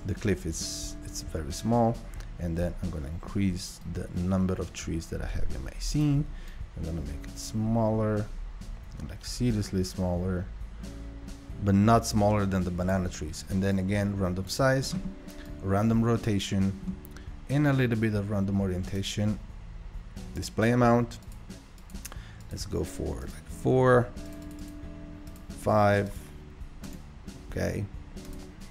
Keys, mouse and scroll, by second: 3.9-9.6 drag, 13.8-28.7 drag.